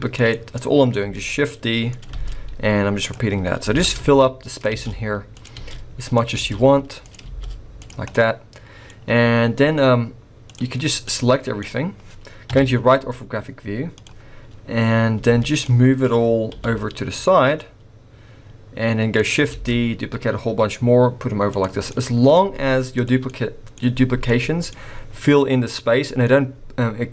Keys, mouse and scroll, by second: 1.0 s, 2.1 shift+d, 3.3-3.8 scroll down 2, 3.8-7.2 typing, 8.1 middle click, 9.4-10.3 scroll down 1, 10.4 click, 11.0 click, 13.9 click, 13.9 KP_3, 14.4-15.1 scroll up 2, 15.1 z, 16.5 g, 19.5 shift+d, 21.8 scroll down 1, 21.9 middle click, 22.4 z, 23.2 middle click, 24.3 middle click, 25.3 middle click.